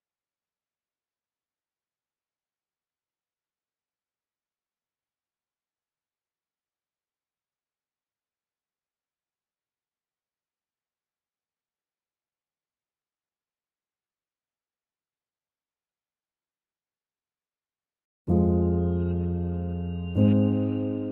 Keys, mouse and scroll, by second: 4.5 click, 9.4-15.4 drag, 16.8 ctrl+a, 18.1 click.